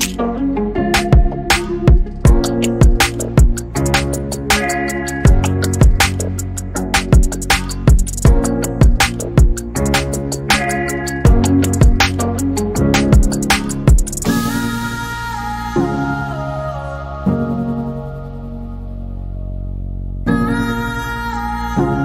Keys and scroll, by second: 11.7-12.8 typing.